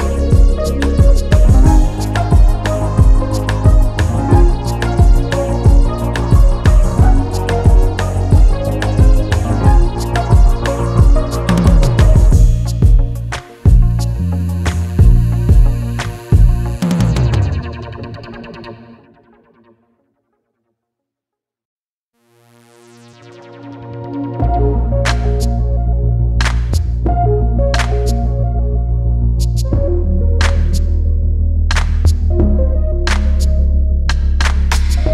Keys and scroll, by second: 5.7 Return, 8.0 alt+Return.